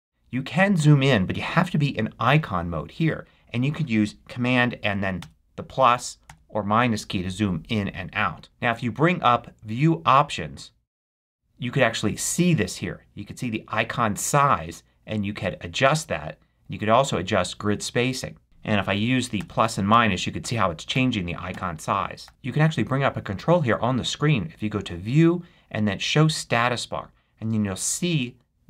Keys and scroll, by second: 5.1 super+=, 6.2 super+-, 19.3 super+=, 19.8 super+-, 20.3 super+=, 20.8 super+-, 21.4 super+=, 22.1 super+-.